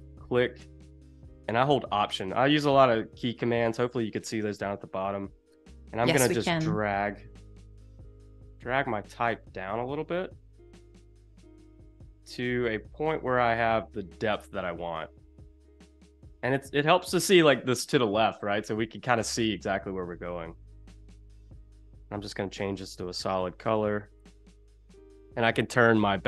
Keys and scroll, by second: 5.5 shift+super+[, 21.9 i, 24.7 v.